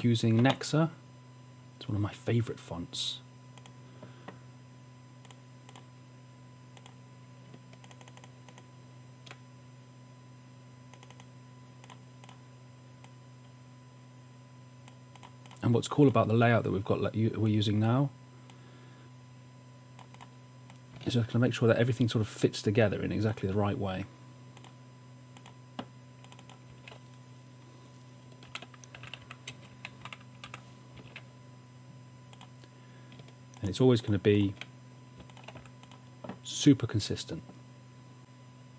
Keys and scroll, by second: 26.8 super+a, 28.5-31.0 typing, 31.2 super+a, 33.5 typing, 35.7 v.